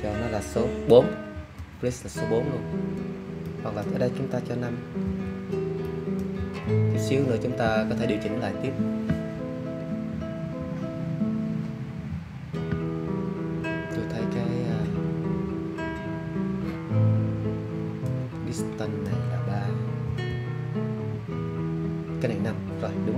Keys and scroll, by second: 1.3 4, 5.0 5, 20.0 3.